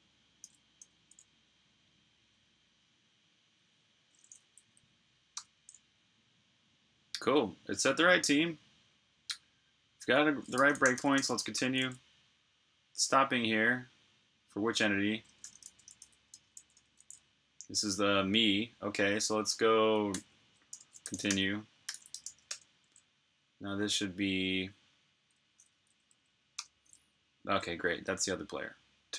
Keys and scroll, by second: 0.3-0.7 typing, 4.5 Up, 4.7 Up, 5.3 Return, 10.3-11.7 typing, 15.1-17.0 typing, 20.0-23.0 typing, 25.7 Up, 25.9 Up, 26.5 Return.